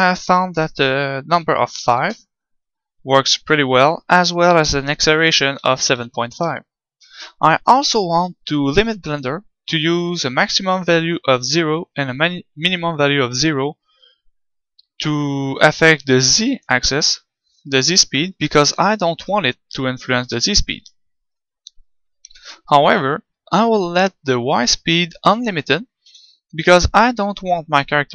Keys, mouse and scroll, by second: 20.1 g, 20.8-25.4 right drag, 26.0 KP_7.